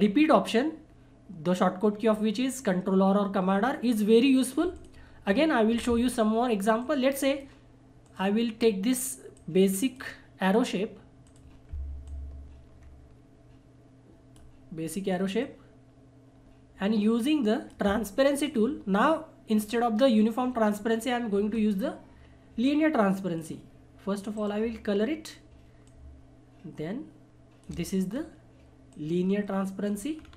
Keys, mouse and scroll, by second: 4.7-15.4 drag, 15.4-20.7 drag, 21.5 scroll up 1, 23.3 click, 24.3 right click, 25.8-28.1 drag, 28.1 scroll up 1, 28.9 click, 30.2 scroll down 1.